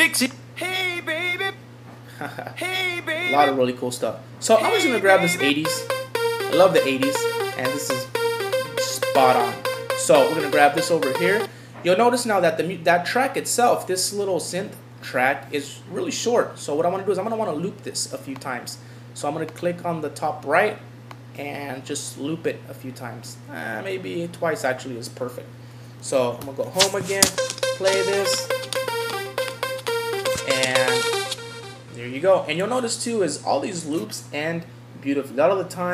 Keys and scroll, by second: 26.4 Home.